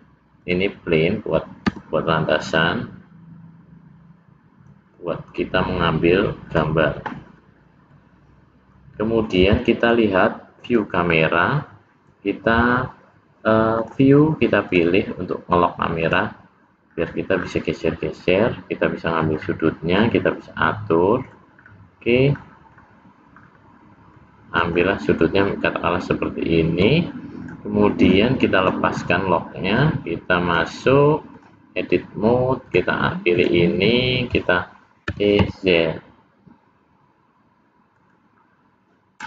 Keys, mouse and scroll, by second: 1.7 s, 7.9 middle click, 10.6 click, 13.8 click, 14.7 click, 16.0 click, 16.9-18.2 scroll down 2, 18.2 middle click, 19.4 scroll down 1, 20.0 middle click, 21.6-22.3 scroll up 2, 22.3-23.0 scroll down 4, 23.4-24.1 scroll up 2, 24.1 scroll up 1, 24.2 middle click, 24.8 scroll down 1, 25.6 middle click, 27.4 click, 28.5 click, 30.4 click, 32.7 click, 33.3 click, 35.1 e.